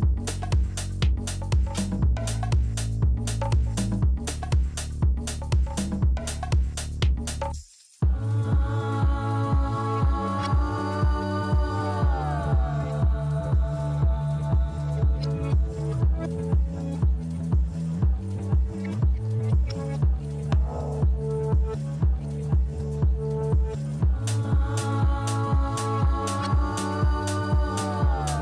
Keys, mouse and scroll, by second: 2.1 shift+click, 4.6 shift+click, 7.0 shift+click, 9.9 click, 13.1 click, 15.8 click, 16.9 click, 20.8 click, 22.3 click, 23.0-24.4 typing, 26.0 click, 27.1 click.